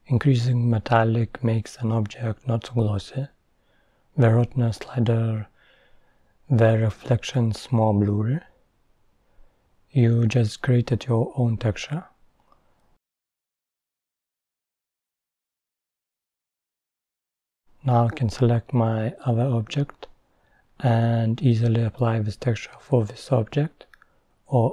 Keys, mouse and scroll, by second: 0.4-4.0 drag, 5.2 scroll up 2, 5.4-9.3 middle drag, 9.3-11.5 drag, 12.8 click, 16.1 scroll down 1, 16.1-17.1 middle drag, 17.1 click, 21.3-24.0 drag.